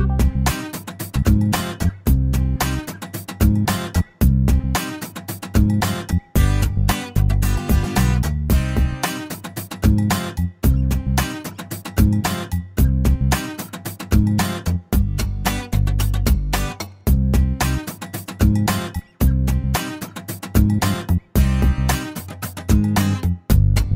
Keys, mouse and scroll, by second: 0.9 click, 2.5 click, 3.8 shift+o, 4.2-4.5 shift+scroll down 1, 4.5 shift+click, 5.5-5.9 scroll up 1, 6.5 click, 7.7 shift+click, 8.1 shift+o, 8.6-9.0 shift+scroll down 1, 9.0-10.1 middle drag, 10.6 middle click, 11.4 middle click, 13.7 scroll up 1, 14.7 click, 16.0 click, 17.9 click, 18.5 middle click, 20.1 click, 22.0 click.